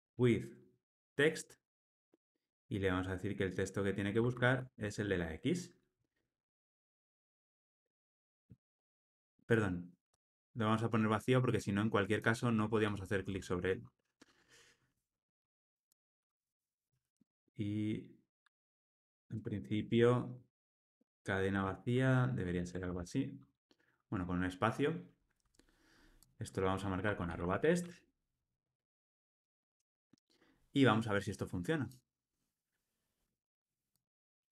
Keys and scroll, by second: 1.9 Return, 6.2 alt+Return, 7.9 ctrl+alt+o, 15.4 Escape, 22.6 alt+super+l, 22.8 ctrl+alt+o, 28.6 Return, 29.4 alt+super+l.